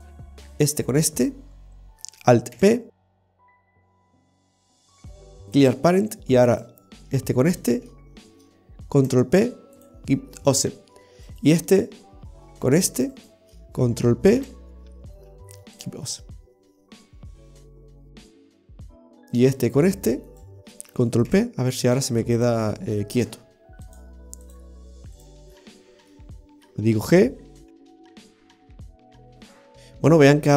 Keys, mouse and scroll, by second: 1.0 shift+right click, 1.2 l, 2.6 alt+p, 6.6 right click, 7.6 shift+right click, 9.1 ctrl+p, 11.4 right click, 13.3 shift+right click, 14.5 ctrl+p, 19.5 right click, 20.4 shift+right click, 21.4 ctrl+p, 24.0 click, 25.3 right click, 25.6-26.0 scroll down 5, 26.2 middle click, 27.7 right click, 27.7 g, 28.4 ctrl+z, 29.6 KP_3.